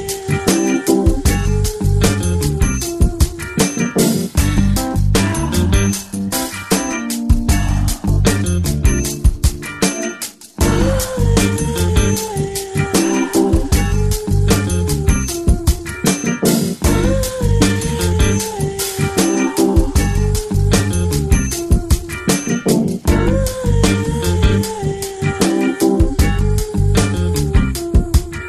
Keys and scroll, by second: 0.0 [, 3.4 ctrl+alt+z, 3.6 ctrl+alt+z, 4.2 ctrl+alt+z, 4.5 ctrl+alt+z, 4.7 ctrl+alt+z, 5.1 ctrl+alt+z, 5.3 ctrl+alt+z, 5.5 ctrl+alt+z, 7.5 [, 7.7 [, 12.3 ], 12.6 ], 16.7 ], 16.9 ], 25.6 ctrl+shift+z, 26.8 z.